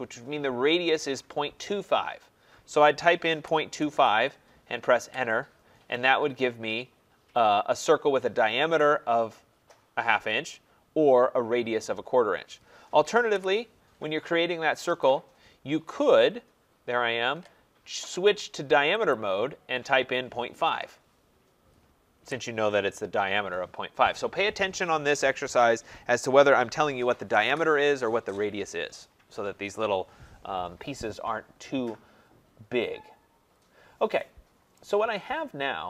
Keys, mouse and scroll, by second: 3.2-5.7 typing, 6.9 middle click, 7.0 middle click, 7.3 middle click, 7.4 middle click, 7.4 middle click, 8.8 click, 11.0 middle click, 13.3 Delete, 15.0 click, 16.2 click, 19.1 click, 22.2 Return, 32.2 middle click, 32.4 middle click, 33.4 middle click, 33.5 middle click, 33.6 middle click, 34.8 right click.